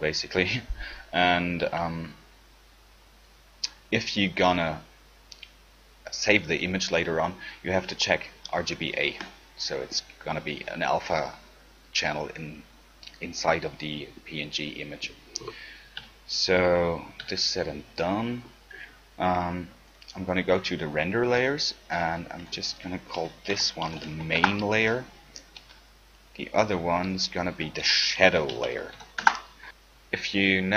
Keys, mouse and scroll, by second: 9.4-14.3 drag, 16.2 z, 17.4 z, 20.9 right click, 22.6-24.4 right drag, 26.3 click, 28.8 d.